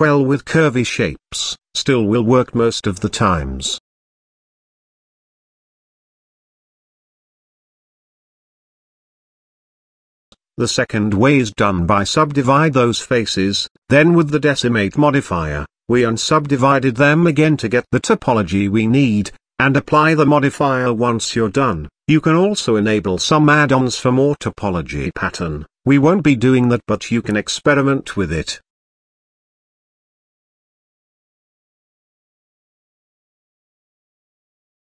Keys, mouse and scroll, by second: 0.3-2.1 shift+middle drag, 2.1 Tab, 3.5 Tab, 3.9-7.0 shift+middle drag, 7.5-8.3 shift+middle drag, 8.3 ctrl+z, 8.7 ctrl+z, 9.1 ctrl+z, 9.7 ctrl+z, 10.5-13.1 right drag, 13.9-16.4 drag, 17.4 click, 18.2 Tab, 19.7-22.0 drag, 22.2-24.2 drag, 24.2 Tab, 24.8-25.1 scroll down 1, 25.1-27.5 middle drag, 30.3-31.0 scroll up 2, 31.6-31.9 scroll down 1, 31.9-32.9 shift+middle drag, 32.9 Tab, 33.3 a, 34.1 Tab, 34.3 click.